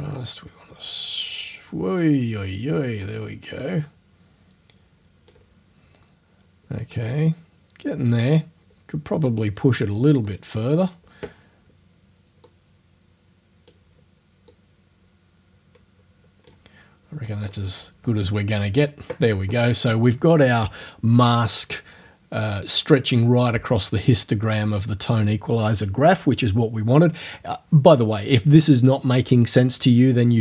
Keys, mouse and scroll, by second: 3.1-5.5 drag, 10.3 click, 12.5-13.9 drag, 14.5-16.7 drag, 17.5 click.